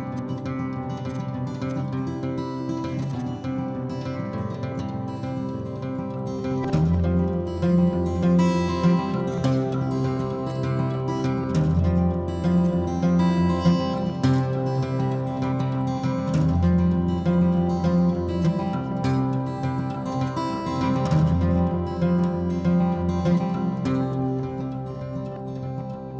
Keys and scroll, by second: 0.8 ctrl+h, 2.4 Delete, 3.7 Delete, 4.3 Escape, 4.5 Escape, 4.8 h, 14.2 ctrl+g, 15.7 m, 25.5-26.1 typing.